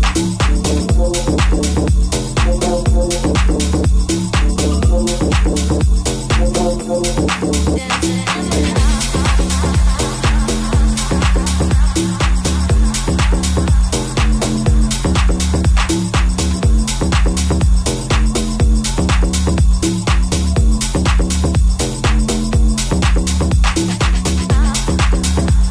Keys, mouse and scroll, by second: 0.3 Tab, 12.2-25.7 middle drag.